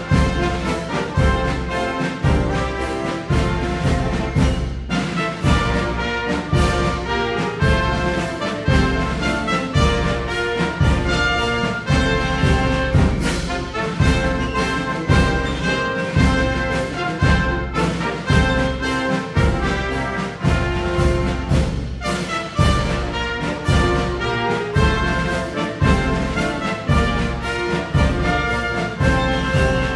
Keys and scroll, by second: 5.7-8.1 typing.